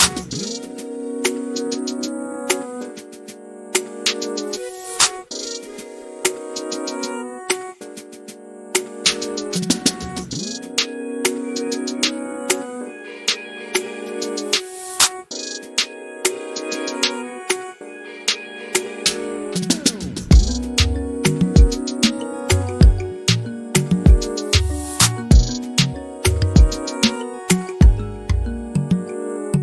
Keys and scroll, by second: 2.6 r, 4.4 space, 8.8-9.8 typing, 12.1-12.8 typing.